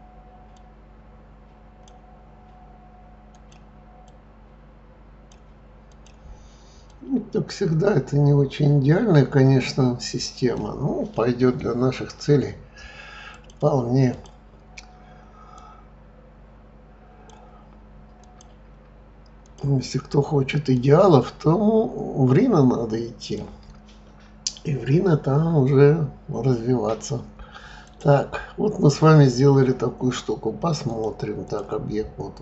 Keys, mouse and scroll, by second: 0.5 click, 3.3 click, 4.0 click, 5.9 click, 6.9 click, 13.3 click, 14.1 click, 15.5 click, 18.2 click, 19.4 click, 20.7 click, 27.8 click, 30.8-32.4 drag.